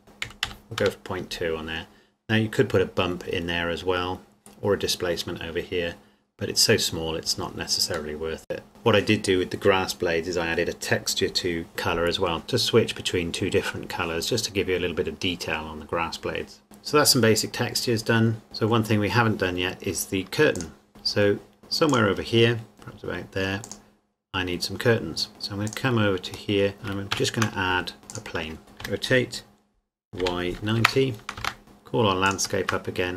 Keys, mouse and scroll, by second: 0.5 KP_2, 0.9 KP_Enter, 3.4 scroll down 1, 6.1 scroll down 1, 8.6 middle click, 8.7 scroll down 1, 16.6 click, 18.4 middle click, 18.8 scroll down 1, 19.2 scroll up 1, 19.4-20.6 scroll down 1, 20.6 click, 20.9 middle click, 21.9 click, 22.7 middle click, 23.6 click, 25.6 click, 26.5 middle click, 27.1 shift+a, 28.1 click, 28.8 r, 30.2 y, 30.6 KP_9, 31.4 KP_Enter, 32.0 KP_Enter, 32.2 shift+click.